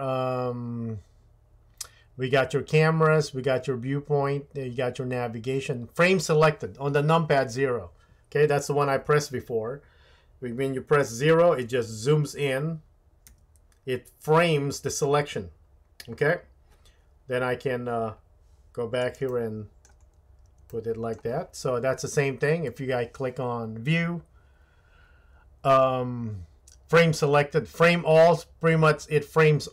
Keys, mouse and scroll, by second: 13.3 KP_Decimal, 22.8-29.7 drag.